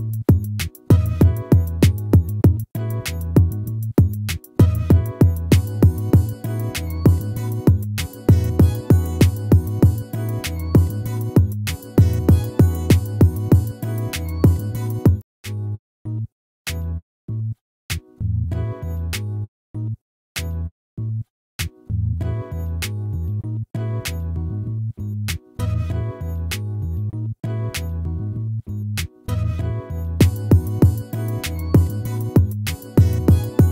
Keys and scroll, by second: 25.3 ctrl+-.